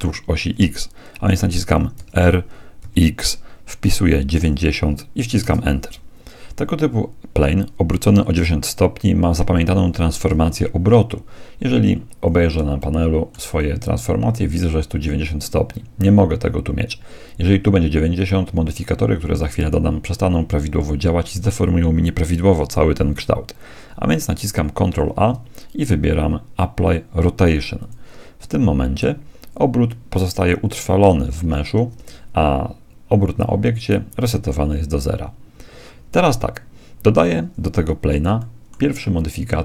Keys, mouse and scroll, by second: 1.9 r, 10.3 n, 12.8-14.7 middle drag, 24.9 ctrl+a, 31.3 Tab, 31.9 Tab, 36.1-37.9 middle drag, 38.3-39.6 middle drag.